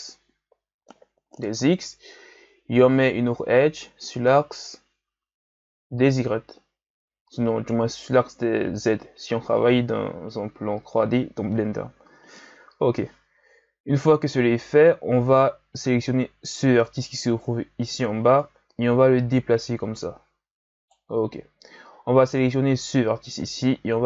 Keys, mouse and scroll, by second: 16.8 right click, 18.4 right click, 22.1 right click, 22.6-23.6 ctrl+scroll up 3, 23.6-24.0 drag.